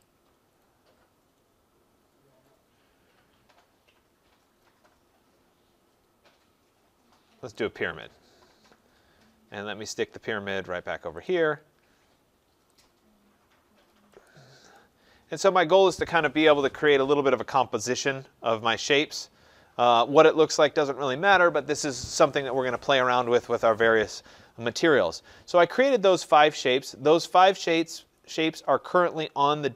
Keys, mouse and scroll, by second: 7.6 click, 9.1 scroll, 9.2-9.9 scroll down 3, 9.9-10.3 scroll up 5, 11.3 click, 12.7 scroll, 12.8 click, 14.4 click, 16.9 right click, 17.2 middle click, 17.2 middle click, 17.6 middle click, 17.7 middle click, 18.8 click, 19.9 click, 20.8 click, 22.2 scroll, 24.9-25.4 scroll, 25.4 scroll, 28.2 click.